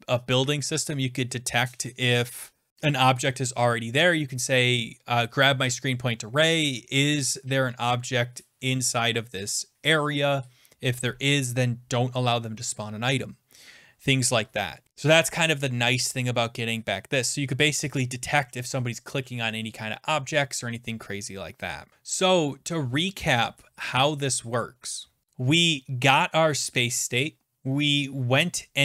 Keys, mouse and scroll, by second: 16.1 scroll down 8, 16.7 scroll, 16.8 scroll down 2, 22.3 click, 23.9 click, 25.7 click.